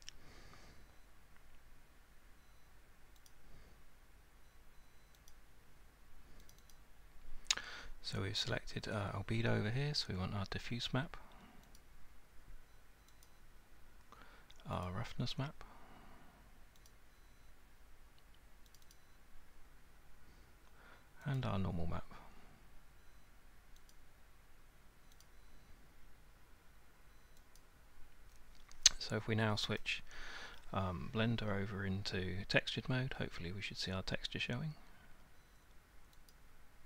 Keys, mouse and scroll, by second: 3.3 click, 5.3 click, 6.5 click, 6.7 click, 11.8 click, 13.3 click, 14.8 click, 18.8 click, 18.9 click, 21.4 click, 23.9 click, 25.2 click, 27.6 click, 36.3 click.